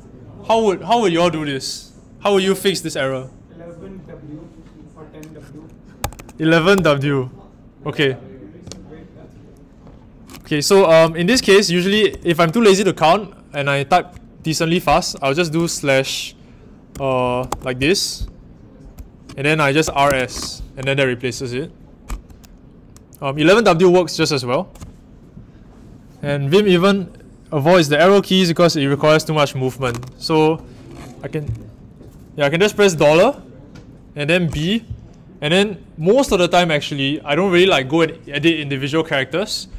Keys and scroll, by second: 6.0-6.7 typing, 11.0-12.2 typing, 15.5 /, 16.6-17.9 typing, 19.6-20.5 typing, 32.9 shift+4, 34.5 b.